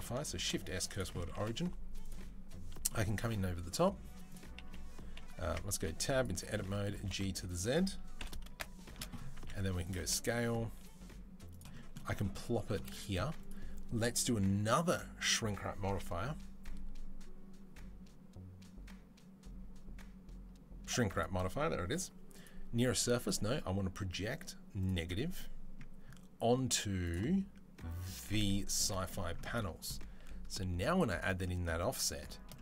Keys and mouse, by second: 0.2 shift+s, 1.3 shift+a, 5.2-13.3 middle drag, 5.3 Tab, 5.6 g, 6.8 g, 8.0 KP_7, 9.2 s, 9.8 g, 13.3-24.7 drag, 24.7-26.9 middle drag, 26.9 click, 27.0-30.7 middle drag, 30.7-32.6 drag.